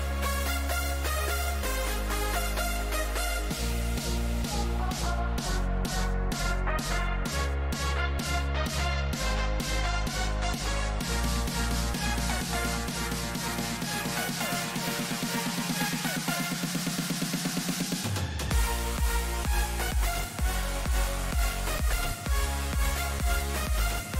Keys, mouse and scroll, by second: 2.8 middle click, 4.5 KP_3, 5.2 z, 8.8-10.4 drag, 14.5-21.0 middle drag, 18.5 z, 22.0-24.1 middle drag.